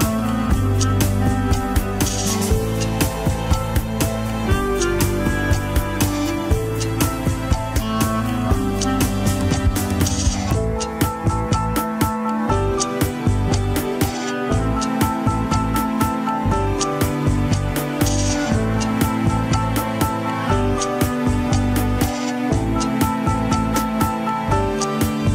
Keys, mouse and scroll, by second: 0.2 shift+click, 0.5 ctrl+Tab, 1.5 alt+z, 2.3 ctrl+click, 2.4 alt+z, 2.7-5.2 middle drag, 5.4-6.8 drag, 6.8 middle click, 7.4 click, 7.9-9.5 middle drag, 9.5 scroll up 1, 9.7 middle click, 10.2-10.7 scroll down 2, 11.2-15.9 ctrl+drag, 15.9 alt+z, 17.3 ctrl+click, 17.3 alt+z, 17.4-18.5 middle drag, 18.5 scroll up 1, 18.7 middle click, 19.0 alt+z, 20.2 ctrl+click, 20.7 alt+z, 20.9 middle click, 21.4 click, 22.3 alt+z, 23.1 ctrl+click, 23.6 alt+z, 24.0 click, 24.5 alt+z, 25.2 ctrl+click.